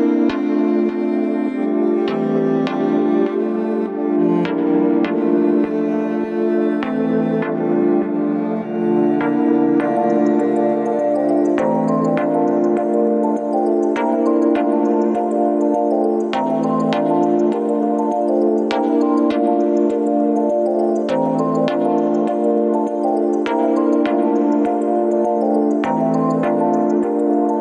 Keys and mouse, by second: 2.0 middle click, 4.1-4.5 shift+middle drag, 4.9-5.4 middle drag, 5.7 Tab, 7.9 click, 9.3 ctrl+s, 10.1 click, 10.5 Tab, 11.1 Tab, 11.5 click, 19.5 click, 21.1 ctrl+s, 21.7-22.4 middle drag, 23.6 Tab, 24.8 click, 25.8 w, 26.2 click, 27.0 click.